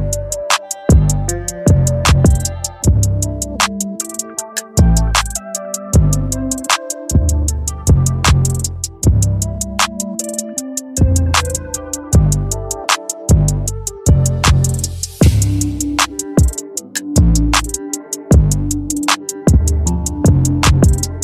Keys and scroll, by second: 13.6 Return.